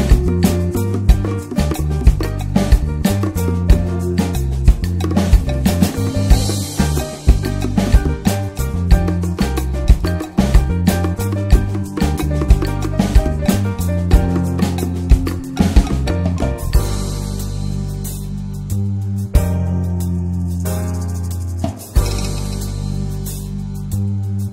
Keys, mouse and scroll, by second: 0.6 alt+middle click, 0.9 alt+z, 1.2-1.6 shift+middle drag, 1.6 r, 3.2-4.2 middle drag, 4.2 s, 4.8 alt+middle click, 5.3 click, 5.5 alt+middle click, 6.4 middle click, 6.6 Tab, 6.9 Tab, 7.7 alt+z, 8.1 middle drag, 8.4 click, 8.9 click, 10.2 Tab, 10.6-12.5 middle drag, 12.5 ctrl+r, 13.4 ctrl+r, 13.9 alt+middle click, 14.2 alt+z, 14.5-16.3 middle drag, 16.3 scroll up 1, 16.5 middle click, 17.1 click, 17.4 shift+click, 17.7 alt+middle click, 17.9 alt+scroll up 1, 18.0 alt+z, 18.2 alt+z, 18.6 middle click, 19.2 1, 19.5 click, 20.0 shift+click, 20.3-23.4 right drag, 23.4 scroll down 1, 23.7 middle click.